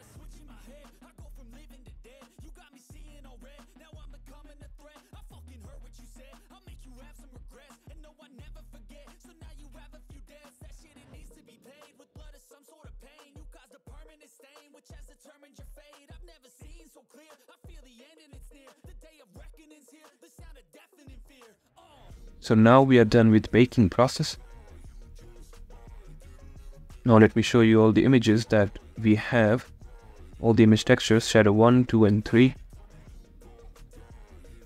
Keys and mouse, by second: 0.4-7.1 drag, 9.6 click, 10.4 click, 12.2 shift+click, 18.5 click, 25.5 click, 25.7-34.6 middle drag.